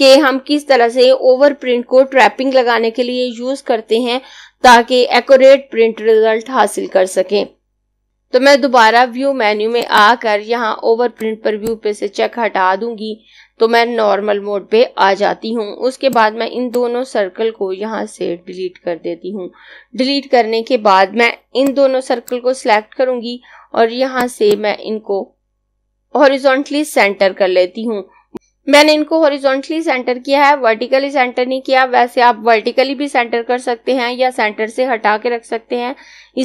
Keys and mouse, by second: 9.8 click, 16.0 click, 18.3 Delete, 21.4 click.